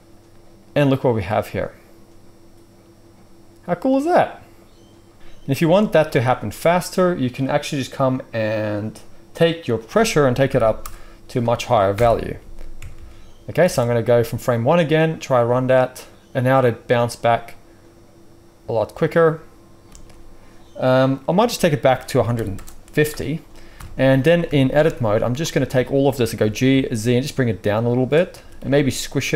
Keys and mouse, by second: 2.6-6.1 middle drag, 5.5 space, 6.1-9.7 right drag, 9.7 middle click, 10.4 2, 11.9 shift+Left, 12.8 Tab, 12.9 Tab, 12.9-13.5 middle drag, 13.6 space, 19.8 space, 23.7 KP_1, 24.4 Tab, 24.8 z, 25.7 a, 26.3 g, 27.6 click, 27.6 middle click, 27.6-29.3 right drag, 28.3 s.